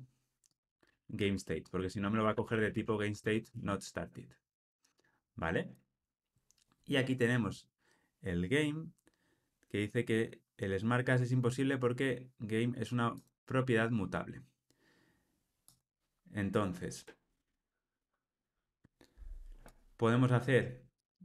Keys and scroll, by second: 3.2 Return.